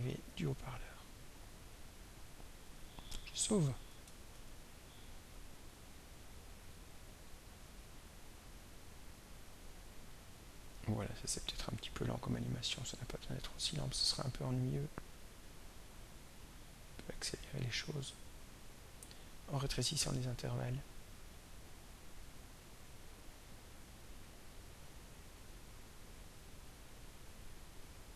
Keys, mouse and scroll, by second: 1.7 click, 4.2 ctrl+s, 5.9-12.0 drag, 12.8-13.7 drag, 15.0 click, 16.9-18.7 drag, 20.6 click, 21.9 click, 23.4-25.0 drag, 25.8-27.2 drag, 27.8 click.